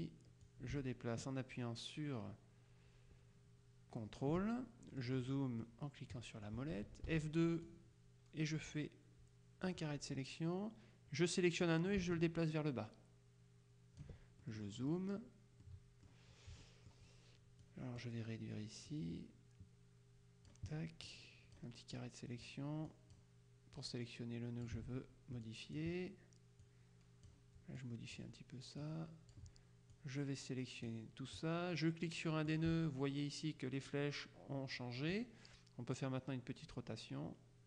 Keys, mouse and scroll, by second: 0.5-4.9 drag, 5.0 middle click, 5.1 click, 7.2 F2, 7.7-10.3 drag, 11.7-14.6 drag, 14.5 ctrl+middle click, 15.7 click, 16.9 click, 17.7 click, 19.0-21.1 drag, 21.3 click, 23.9 click, 25.5 click, 26.7-27.8 drag, 28.4 click, 28.9-29.9 drag, 30.0 click, 32.5 click, 36.1-37.6 drag.